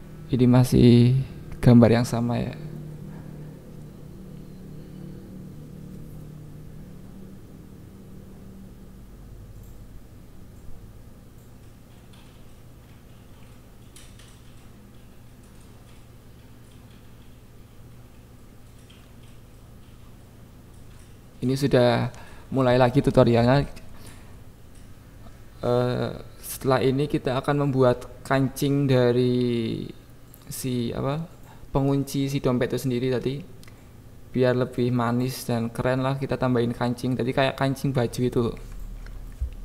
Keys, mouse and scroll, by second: 18.0 click, 18.8 KP_1, 31.6 click, 32.1 KP_7, 32.5 Tab, 32.9 click, 33.7 alt+z, 33.9 click, 34.4 g, 34.5 Down, 34.7 Down, 35.1 click, 35.5 click, 36.0 g, 36.7 g, 36.9 y, 37.1 Up, 37.8 Down, 38.1 click, 38.5 KP_1, 38.9 click, 39.0 Tab, 39.5 click.